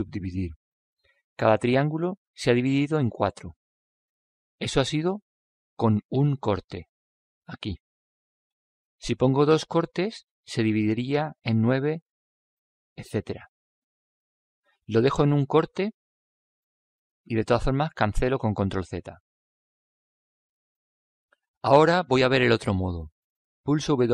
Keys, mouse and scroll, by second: 1.0-3.9 middle drag, 10.0 click, 13.4-17.7 drag, 19.9 ctrl+z.